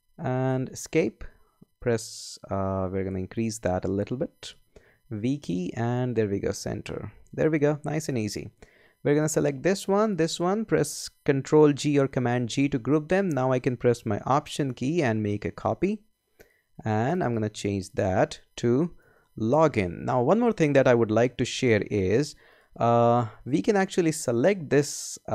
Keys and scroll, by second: 0.0-0.5 typing, 0.7 Escape, 4.7 v, 12.4 super+g, 18.8-20.1 typing.